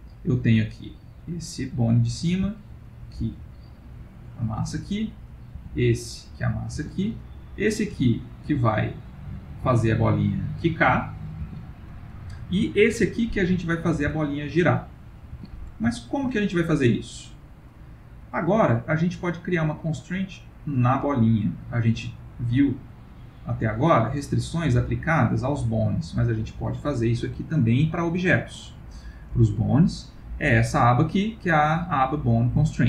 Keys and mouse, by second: 0.7 click, 1.6 click, 2.3 g, 5.2 click, 5.5 g, 7.4 click, 7.9 g, 12.8 click, 14.0 r, 16.0 ctrl+middle click, 16.4 middle click, 17.6 middle click, 18.3 ctrl+middle click, 20.7 click, 22.4 click, 26.2 click, 29.3 click.